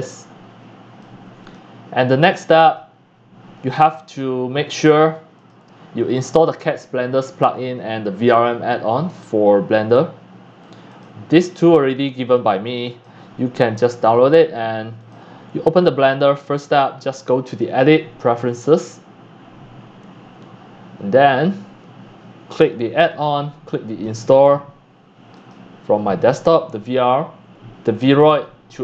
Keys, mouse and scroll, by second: 0.7 click, 1.0-1.4 drag, 3.4-4.5 drag, 4.6 click, 5.3 click, 10.2 click, 10.9 click, 11.3 click, 12.2 click, 12.8 click, 15.0 click, 15.6 drag, 15.9 click, 16.8 click, 17.6 scroll up 1, 18.7 scroll up 1, 23.1 click, 23.9 click, 25.5-27.9 drag.